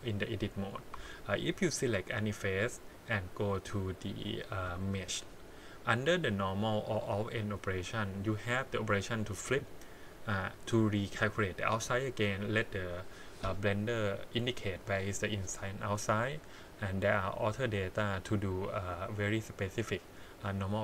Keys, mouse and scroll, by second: 0.9 3, 1.3 click, 4.7 click.